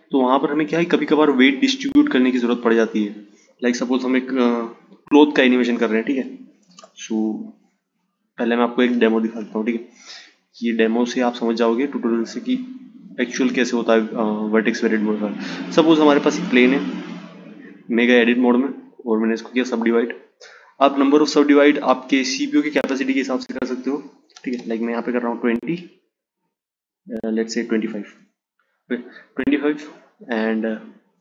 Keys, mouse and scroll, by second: 6.2 shift+a, 9.3 s, 12.1 click, 17.0 Tab, 18.0-20.6 right drag, 20.6-25.1 drag, 25.8-29.2 drag, 31.0-31.2 drag.